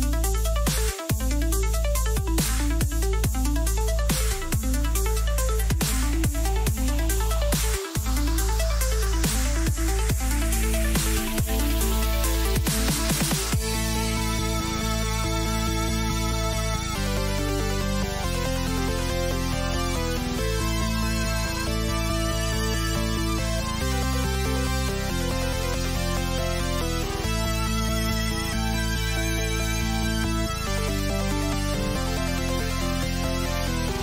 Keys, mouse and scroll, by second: 0.3 k, 17.7 click, 18.0-20.8 middle drag, 28.6-33.0 middle drag, 29.8 a, 33.9-34.0 middle drag.